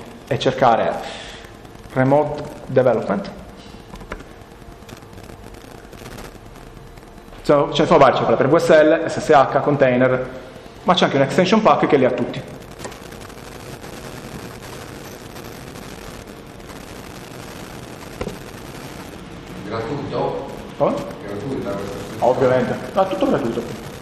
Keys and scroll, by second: 0.0 BackSpace, 1.6-3.4 typing.